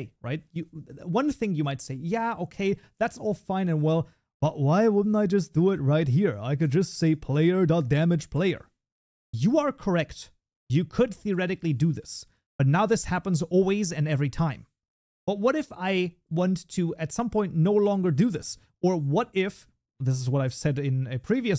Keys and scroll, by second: 5.2 ctrl+alt+l, 7.2 Tab, 12.5 ctrl+s, 14.5 Delete, 15.2 ctrl+s.